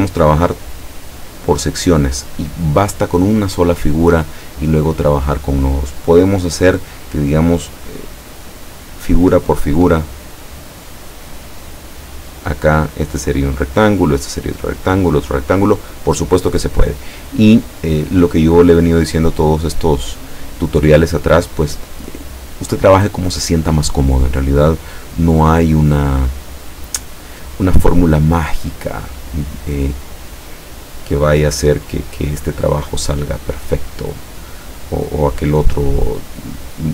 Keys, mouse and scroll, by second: 27.7 click, 28.4-36.9 drag.